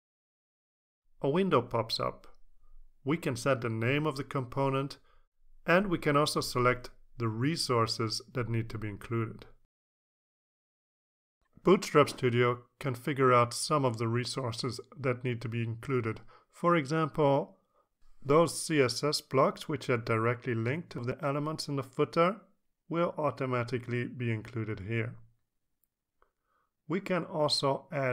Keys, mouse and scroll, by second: 0.2 click, 2.0 click, 2.3-5.3 typing, 5.5 Left, 6.4 BackSpace, 11.7-12.7 scroll down 2, 12.9-16.0 scroll up 2, 16.0-17.1 scroll up 1, 17.3 click, 18.5-19.9 scroll down 2, 21.3 click, 21.8-22.6 scroll down 2, 22.8-23.3 scroll down 2, 23.5-24.4 scroll down 4, 24.5-25.8 scroll down 6, 26.4-28.1 scroll up 2.